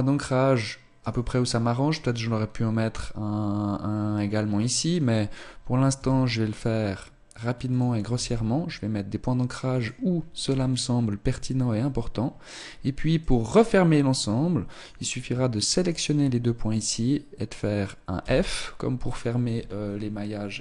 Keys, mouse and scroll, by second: 1.0 right click, 4.7 right click, 6.0 e, 8.1 e, 9.0 click, 10.5 e, 14.7 right click, 15.3 shift+right click, 18.2 f.